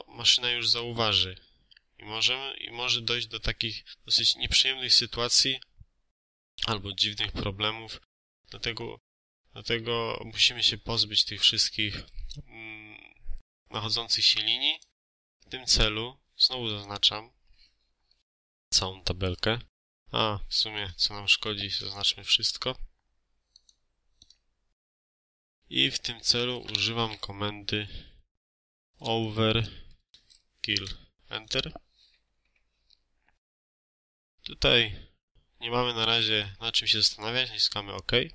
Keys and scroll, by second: 19.6 Escape, 28.2-29.7 typing, 30.6 Return.